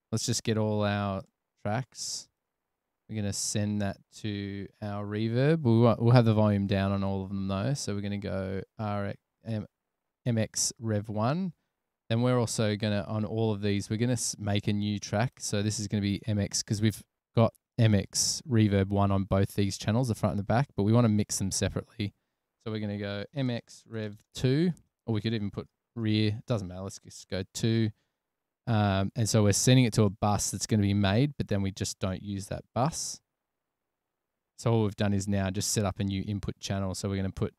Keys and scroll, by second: 23.0-25.1 typing, 27.3 2.